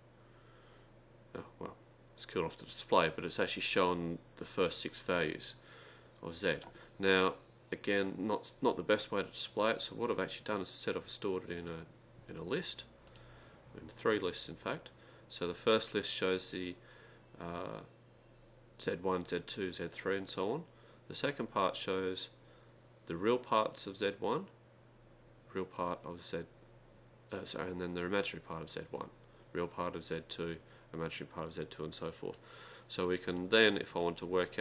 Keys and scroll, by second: 11.8 Down, 11.8 Up, 11.8 ), 13.0-13.7 typing, 33.3 Return, 33.9-34.6 typing.